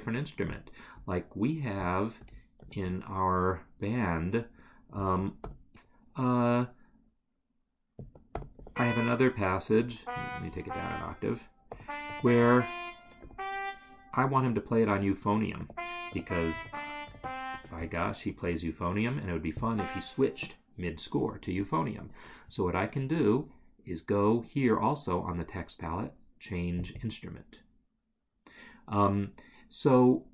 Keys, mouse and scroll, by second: 1.8 shift+click, 2.6 ctrl+c, 5.0 click, 5.4 ctrl+v, 8.0 space, 9.9 ctrl+Down, 10.5 Up, 15.6 g, 18.0 Escape, 27.0 double click.